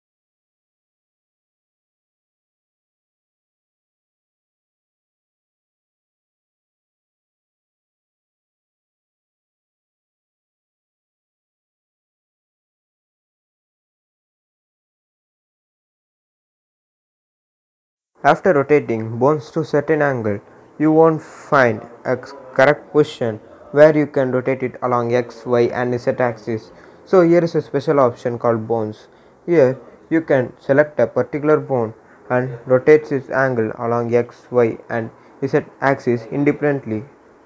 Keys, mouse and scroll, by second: 0.4 r, 2.2 click, 3.9 scroll up 1, 5.8-12.3 drag, 12.3-15.3 shift+drag, 15.3 r, 17.0 click, 17.4 scroll up 1, 18.2-27.7 drag, 32.0-35.2 drag, 35.2-37.4 drag.